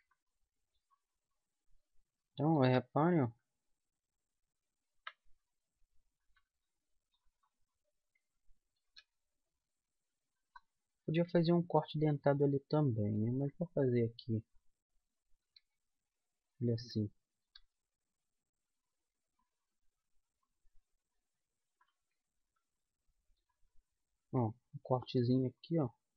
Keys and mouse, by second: 0.0-2.1 middle drag, 2.1 right click, 2.9 g, 7.2 right click, 9.2 g, 11.7 g, 15.7-16.9 right drag, 15.9 g, 17.0 middle click, 17.9 g, 19.9-21.2 drag, 25.3-26.1 middle drag.